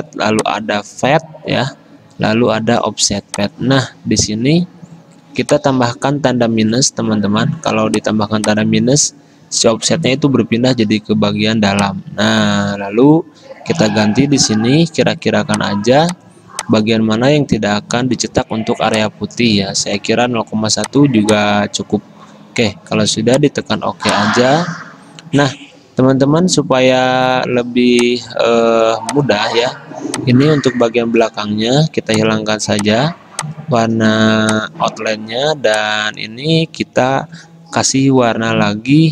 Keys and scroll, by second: 14.4 2, 20.1 1, 31.3 ctrl+z, 37.4 F6.